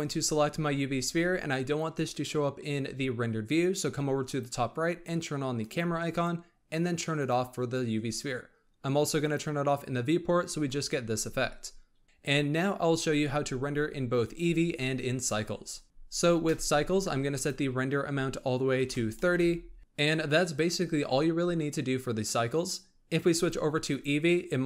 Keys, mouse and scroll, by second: 4.2-7.2 drag, 9.1 click, 12.0-14.4 scroll up 1, 17.3-19.8 drag, 23.3-24.6 drag.